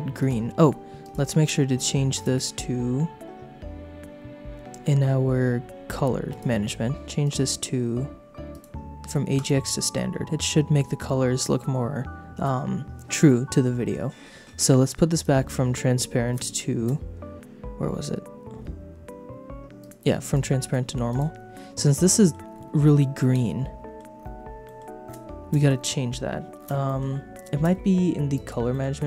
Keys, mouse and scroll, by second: 1.0 click, 6.3 click, 7.2 click, 8.5-9.5 drag, 13.1 click, 15.1 click, 20.3 click, 21.1 click, 21.9 middle click, 23.0 middle click, 23.8 middle click, 24.6 shift+middle click, 25.5 middle click, 26.8 click, 27.4 middle click, 28.3 click, 28.7 click, 28.7 middle click, 28.7 right click.